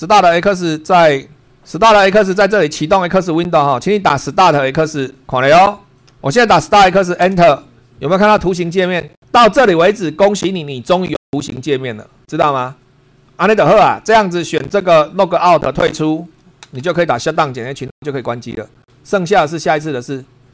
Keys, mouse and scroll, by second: 6.1 super+2, 7.2 Return, 14.5 click, 15.2 click, 16.2 click.